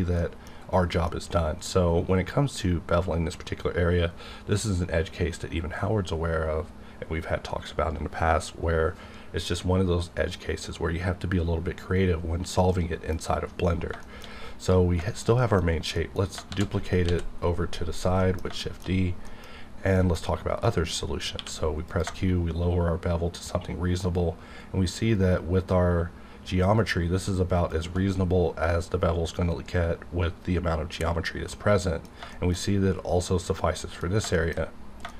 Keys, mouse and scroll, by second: 0.5-0.9 scroll up 2, 1.1-3.1 scroll up 1, 12.3 scroll down 1, 12.9 middle click, 13.5-13.9 scroll down 1, 14.0 shift+middle click, 14.2 scroll up 1, 14.6 click, 15.0 shift+middle click, 15.6 shift+scroll down 1, 15.9 shift+middle click, 16.0 shift+middle click, 16.5 shift+d, 17.1 x, 17.9 click, 18.4 middle click, 18.6 shift+middle click, 19.5 scroll up 1, 19.9 middle click, 20.3 scroll up 1, 20.6 middle click, 20.9-21.4 scroll up 1, 21.4 q, 21.8 click, 29.0-29.6 scroll down 1, 30.4-31.5 scroll up 1, 31.5 middle click, 33.8 middle click, 34.3 middle click, 34.6-35.1 scroll up 3, 35.0 shift+middle click.